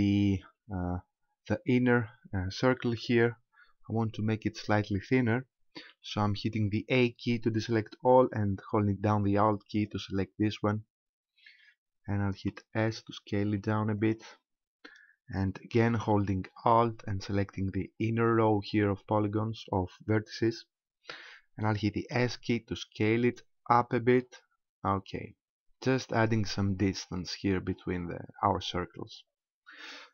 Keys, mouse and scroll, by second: 2.0-2.4 scroll up 1, 6.0 a, 9.7 alt+right click, 12.4 s, 14.2 click, 17.9 alt+right click, 22.1 s, 26.3 click.